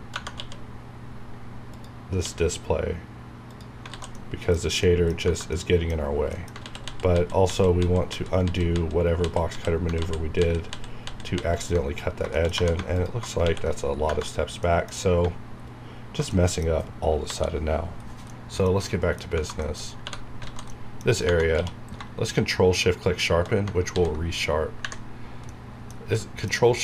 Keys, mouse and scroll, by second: 0.3 q, 1.7 click, 2.2 q, 3.4 click, 3.9 alt+z, 4.1 middle click, 5.2 Tab, 5.4 middle click, 6.0 scroll up 1, 6.3 middle click, 6.6 ctrl+z, 12.0 scroll up 1, 12.3 shift+middle click, 12.7 scroll up 1, 12.9 alt+click, 13.4 ctrl+x, 13.8-14.3 scroll down 2, 14.0 Right, 14.6 middle click, 15.0 scroll up 1, 16.3 middle click, 17.2 KP_7, 18.2 scroll down 1, 18.3 middle click, 19.0 scroll up 1, 19.3 Tab, 19.6 shift+middle click, 19.8 shift+scroll up 2, 20.0 3, 20.6 alt+a, 20.7 middle click, 21.5 q, 22.9 shift+click, 26.1-26.8 middle drag.